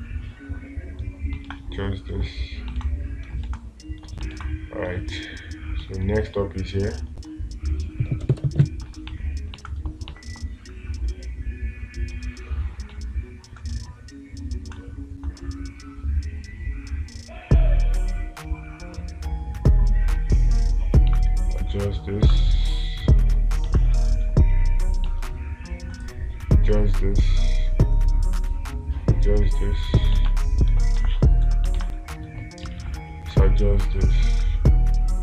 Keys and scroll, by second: 1.9 space, 3.2 space, 4.8 space, 7.5 ctrl+z, 24.1 space, 30.7 space, 32.2 space.